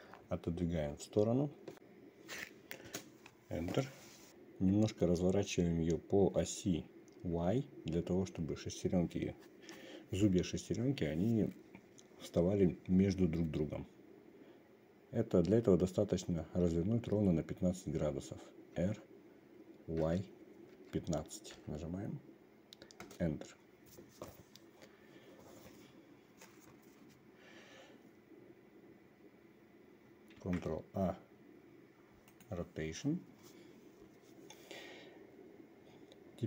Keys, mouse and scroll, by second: 19.3 r, 30.9 ctrl+a.